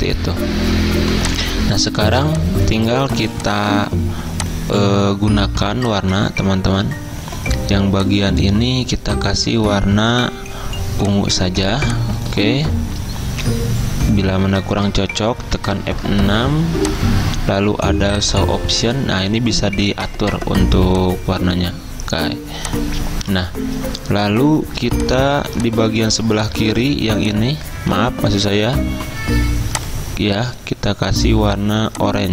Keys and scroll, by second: 1.1 v, 1.5 z, 2.5-3.7 typing, 6.6 ctrl+z, 15.5 F6, 27.8 ctrl+z.